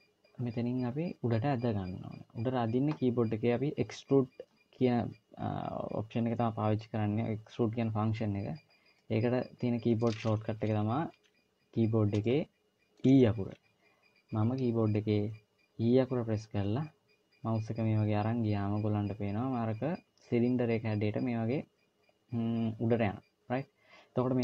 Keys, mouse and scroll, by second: 8.3-8.8 scroll down 1, 8.8 middle click, 10.5 KP_1, 12.0 shift+middle click, 16.2 e.